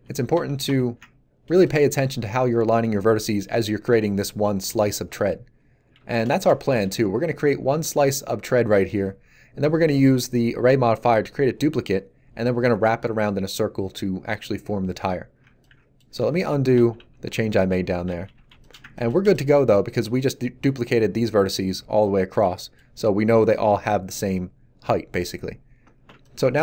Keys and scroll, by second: 16.3 ctrl+z, 18.1 a.